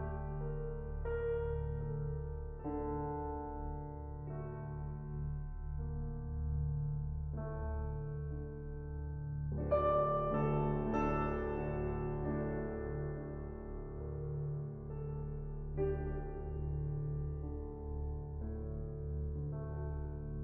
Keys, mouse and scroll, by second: 0.1-0.6 scroll down 1, 0.6-2.8 scroll down 11, 2.8-4.3 drag, 4.5 middle click, 5.2-6.8 scroll up 5, 6.8-9.6 scroll up 11, 9.6-10.8 scroll down 12, 12.4 scroll down 5, 15.0-15.8 scroll up 14, 17.3-17.8 scroll up 3, 18.5-20.4 drag.